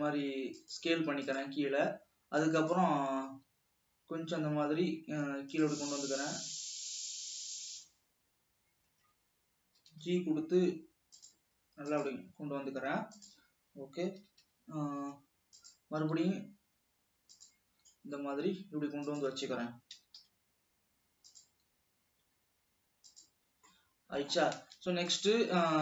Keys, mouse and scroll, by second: 3.1 s, 3.8 e, 6.0 s, 10.0 g, 13.7 g, 14.4 g, 16.4 e, 18.0 s, 20.1 g, 21.8 s, 23.7 scroll down 1, 23.9-25.1 middle drag, 25.1 ctrl+s.